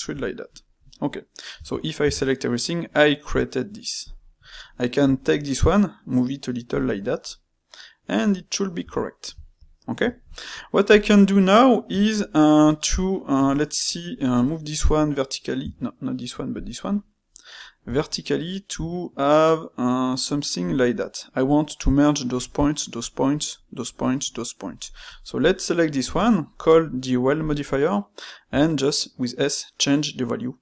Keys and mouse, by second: 1.5 a, 2.0 a, 2.4-4.0 middle drag, 4.0 click, 4.9 g, 7.2-8.7 middle drag, 8.7 Tab, 9.3-10.9 shift+middle drag, 10.9 click, 11.9-14.8 ctrl+middle drag, 14.8 g, 15.6 F1, 16.5 click, 17.8 g, 25.0 click, 25.9 space.